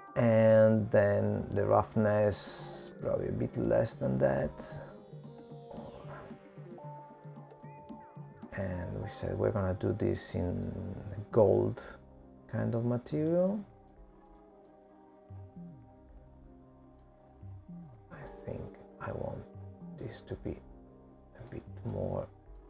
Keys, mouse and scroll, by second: 4.0-6.1 scroll down 2, 6.1 click, 6.1-7.1 scroll down 3, 11.7 click, 17.4 click, 17.9 middle click, 21.6 click.